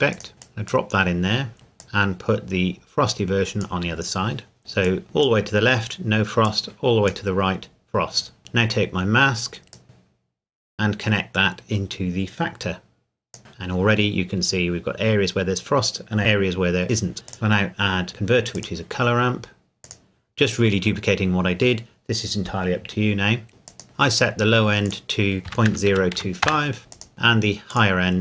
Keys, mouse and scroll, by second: 1.5 scroll down 1, 1.8 click, 4.6 scroll up 1, 4.9 click, 8.4-9.7 scroll down 1, 9.7 click, 14.2-15.2 scroll down 1, 17.3 click, 23.7 click, 25.5 KP_Decimal, 25.7 KP_0, 25.9 KP_2, 26.1 KP_5, 26.4 KP_Enter, 26.9 KP_Enter, 27.2 click.